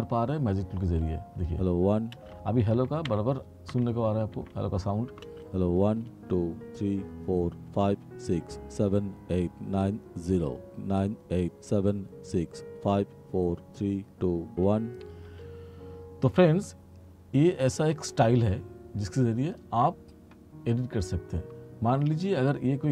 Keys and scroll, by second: 1.4 space, 2.8 r, 5.4 space, 15.3 space.